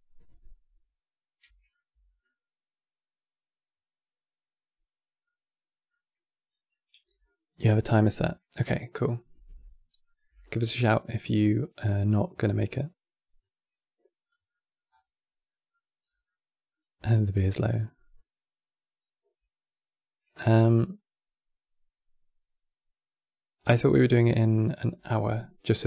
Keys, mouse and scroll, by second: 1.4-4.0 middle drag, 4.0-4.9 scroll down 1, 4.9 scroll down 1, 4.9-7.9 middle drag, 9.7-11.8 middle drag, 11.8 click, 14.2 middle click, 14.6-15.2 scroll up 8, 15.2-15.7 middle drag, 15.7 scroll down 4, 15.9-18.9 middle drag, 25.7-25.8 middle drag.